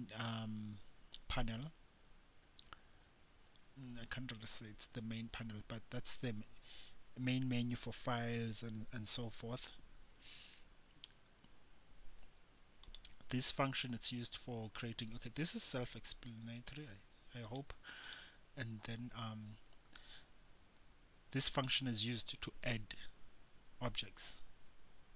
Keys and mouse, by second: 13.0-25.1 drag.